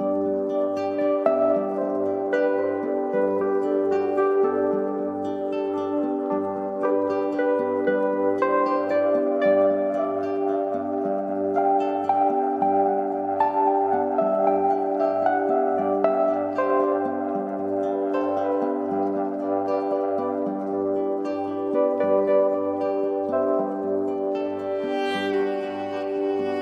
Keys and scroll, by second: 3.6 i, 9.0 shift+Down, 10.0 shift+Up, 15.9 Up, 17.7 Down.